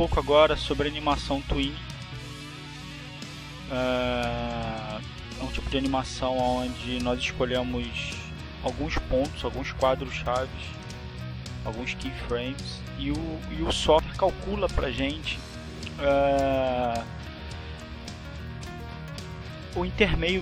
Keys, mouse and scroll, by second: 2.5 click, 10.5-13.6 drag, 14.7 click.